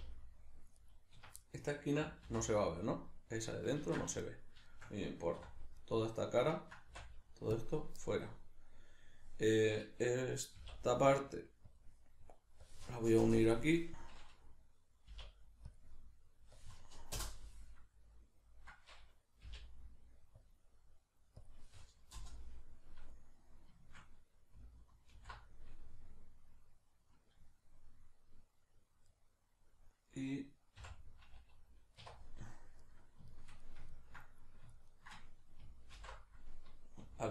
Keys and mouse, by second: 0.9 right click, 1.2 Escape, 1.5 middle click, 2.3 alt+h, 2.5 middle click, 3.9 ctrl+z, 4.2 middle click, 5.4 middle click, 5.4 3, 5.8 right click, 6.5 ctrl+right click, 6.9 x, 8.0-32.8 middle drag, 10.6 k, 25.2 alt+h, 30.8 h, 32.8 right click, 33.3-34.7 shift+middle drag, 34.7 shift+right click, 34.9 shift+right click, 35.9 alt+,.